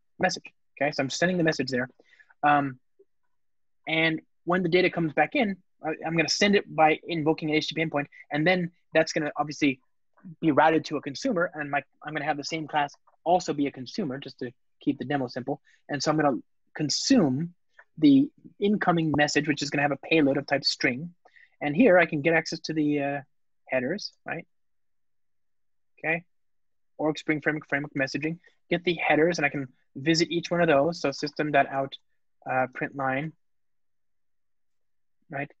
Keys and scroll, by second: 0.9 alt+super+l, 22.7 Return, 23.9 Return, 27.9 ctrl+space, 28.8 Return.